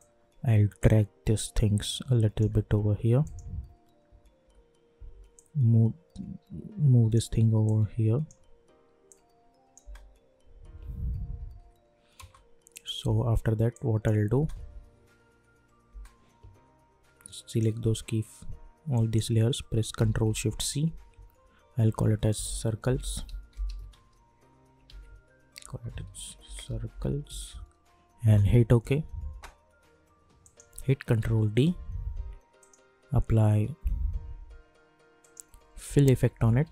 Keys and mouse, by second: 0.2 alt+click, 0.7-2.5 alt+drag, 4.0 =, 4.4 =, 5.3-9.8 drag, 9.8 space, 11.3 -, 11.5 -, 12.1 space, 12.7 click, 13.0 u, 13.7 click, 14.3 space, 17.4 click, 18.9 shift+click, 20.6 ctrl+shift+c, 22.2-24.4 typing, 24.8 ctrl+a, 25.6-27.7 typing, 28.2 Return, 30.4 click, 31.1 ctrl+d, 32.6 click, 35.2 click, 35.7-36.7 typing.